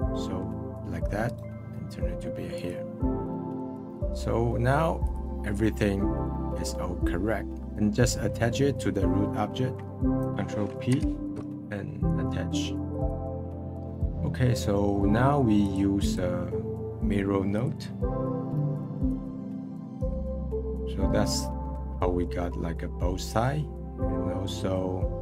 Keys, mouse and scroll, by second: 0.2-1.2 middle drag, 1.2-3.3 right drag, 3.3 middle click, 3.7-4.1 scroll down 2, 4.1 middle click, 4.8-5.1 scroll down 1, 5.1 click, 5.4-5.9 middle drag, 5.9-6.3 scroll up 1, 6.3-7.7 middle drag, 7.7-8.1 scroll down 10, 8.1-9.5 middle drag, 9.5-10.0 scroll up 18, 10.0 ctrl+p, 15.6-20.7 drag, 20.7-25.2 middle drag.